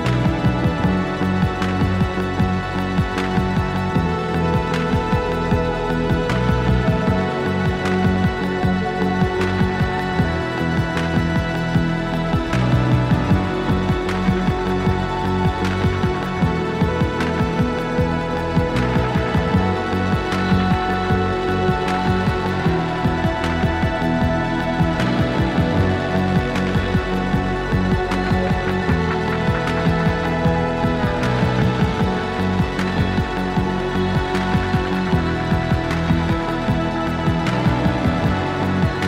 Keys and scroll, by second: 0.3 ctrl+a, 1.4 ctrl+a, 1.8 alt+z, 2.1 KP_1, 3.3 KP_1, 4.1 Tab, 9.9 x, 10.6 z, 12.9 z, 19.1 shift+d, 20.0 s, 21.7 r, 25.0 z, 27.9 x, 32.6 r, 33.2 r.